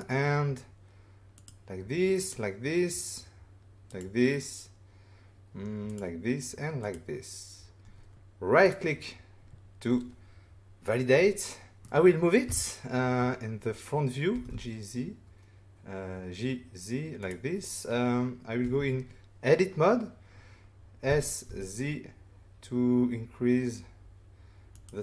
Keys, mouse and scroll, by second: 1.3 click, 2.1 click, 3.9 click, 5.9 click, 6.8 click, 8.6 right click, 11.8 middle click, 12.4 1, 13.1-13.5 scroll up 5, 14.3 typing, 17.2 click, 18.6 Tab, 20.8-21.6 typing, 24.7 click.